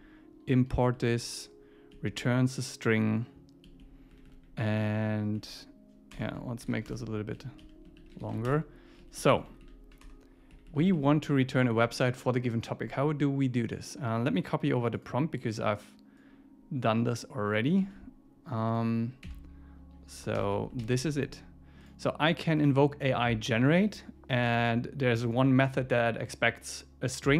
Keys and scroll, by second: 0.9 super+Right, 2.0 Down, 3.6 Down, 4.2 Up, 5.2 Up, 6.6 alt+8, 6.9 Return, 7.4 Down, 8.0 super+Right, 8.2 shift+super+Left, 9.0 Down, 9.4 shift+Up, 10.5 Up, 11.0 super+Right, 11.4 super+Left, 11.6 super+Right, 17.8 super+c, 19.2 super+v, 20.4 alt+super+l, 20.8 super+s, 23.8 Right.